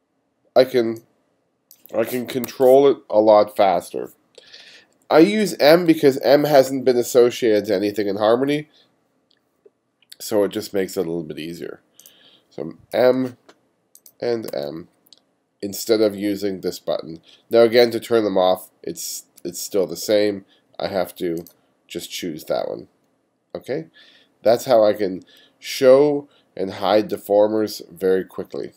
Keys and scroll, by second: 2.5 super+z, 13.0 m, 14.5 m, 19.4 m.